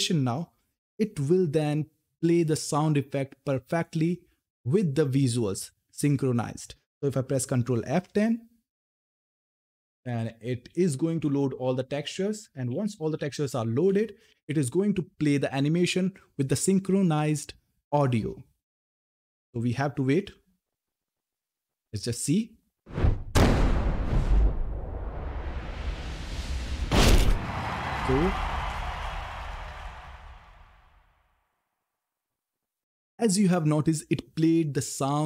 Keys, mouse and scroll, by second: 7.1 ctrl+Num_Lock, 7.6 ctrl+F10, 9.0-14.0 typing.